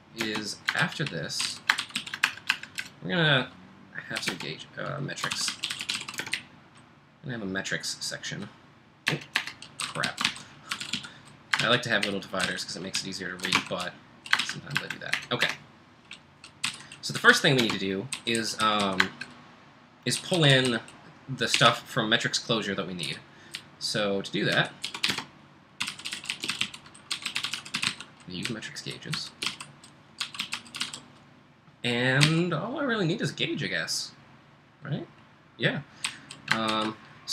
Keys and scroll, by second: 0.0-2.4 typing, 2.8 Return, 4.1-33.0 typing, 36.0-36.7 typing.